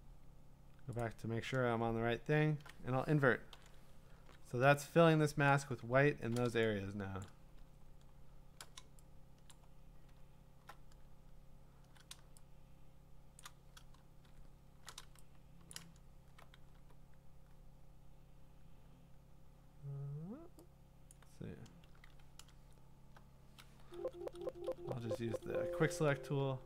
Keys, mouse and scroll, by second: 1.0 click, 1.9-2.5 scroll, 3.5 ctrl+i, 4.2-7.3 ctrl+d, 7.3 click, 7.8-8.8 scroll, 9.4 scroll down 3, 9.5 click, 10.3 scroll, 10.4 middle click, 13.0 scroll, 13.4 click, 14.3 alt+scroll, 15.7 click, 18.9 w, 21.1-25.8 drag, 23.8-25.3 typing.